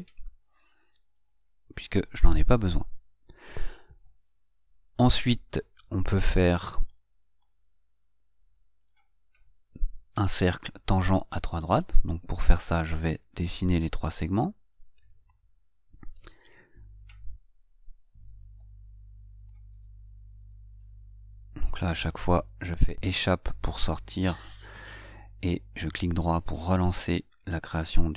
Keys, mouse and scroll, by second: 1.7 click, 7.4-9.2 middle drag, 11.7 right click, 13.4 click, 14.9 click, 18.7 Escape, 20.1 right click, 20.7 click, 22.9 click, 24.7 Escape, 26.3 right click, 27.9 click.